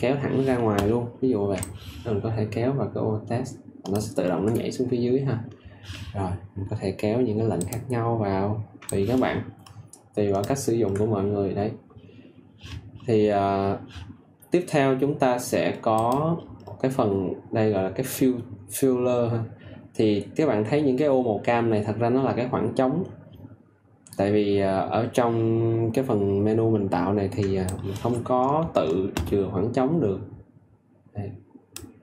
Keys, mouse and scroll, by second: 1.5 alt+click, 8.8 ctrl+click, 27.7 ctrl+click, 31.7 ctrl+click.